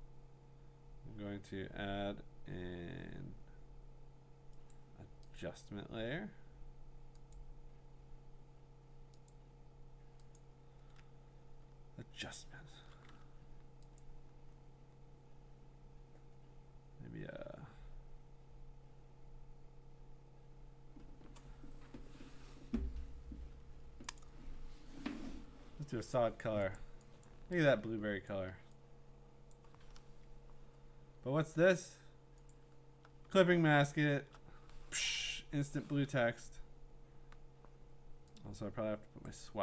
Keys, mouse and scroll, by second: 4.7 click, 5.4 click, 7.3 click, 9.3 click, 10.4 click, 13.2 Escape, 14.0 click, 24.2-25.7 drag, 26.3 click, 26.8 click, 27.3 click, 28.3 click, 29.5 click, 30.0 Return, 32.5 alt+click, 33.5-34.2 scroll, 39.3 click.